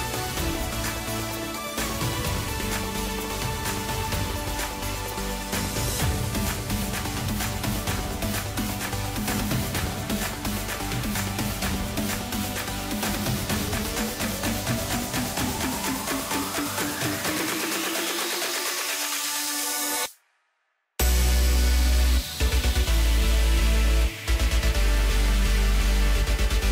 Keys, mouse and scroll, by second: 0.4 shift+click, 1.3-2.1 middle drag, 2.1 shift+click, 2.6-5.7 middle drag, 7.3 alt+s, 10.1-13.1 middle drag, 13.7 Tab, 14.5 KP_1, 15.2 scroll down 2, 15.5-18.3 middle drag, 18.3 KP_Divide, 19.0-20.0 scroll down 4, 20.1 middle click, 20.8 KP_1, 21.6-21.9 scroll up 1, 21.9 scroll down 3, 22.2-25.2 middle drag.